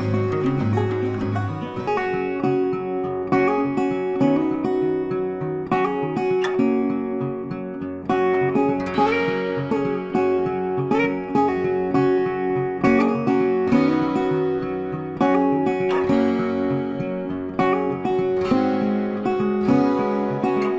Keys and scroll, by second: 4.1-5.4 typing, 6.8-10.5 typing, 13.0 F3, 13.9 Return, 14.5 ctrl+Return, 14.7 ctrl+space, 15.4 ctrl+shift+space, 16.9 c, 17.7 shift+c.